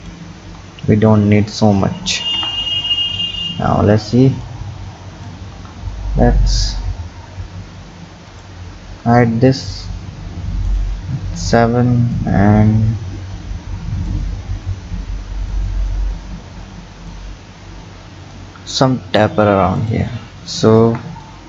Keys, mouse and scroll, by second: 0.0 click, 0.4 Tab, 0.7-2.4 scroll down 6, 2.4 KP_1, 4.5 click, 4.8 click, 8.3 click, 9.6-10.6 scroll down 2, 10.6 click, 11.1-12.2 scroll up 4, 12.2-14.3 drag, 14.3-15.6 scroll down 5, 15.6 click, 19.8 click, 20.8 KP_1.